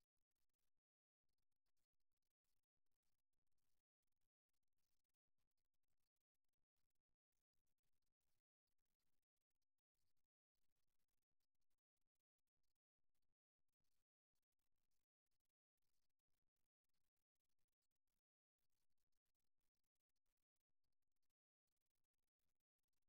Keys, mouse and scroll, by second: 2.3-3.7 middle drag, 3.7-5.0 right drag, 5.0-6.6 middle drag, 6.2 g, 8.8-12.4 right drag, 9.3 g, 11.0 g, 13.2 middle click, 15.8-19.0 middle drag, 19.0 KP_1, 19.2-20.9 middle drag, 21.8 click, 22.6 click.